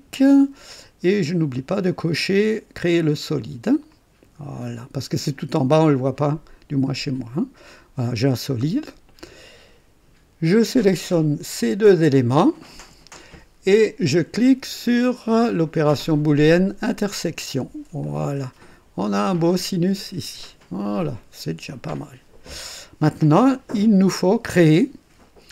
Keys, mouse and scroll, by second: 1.0 click, 3.9 click, 6.8 click, 8.3-9.8 drag, 10.6 click, 12.5 ctrl+click, 16.8 click, 18.0-20.1 drag, 20.9-22.7 drag.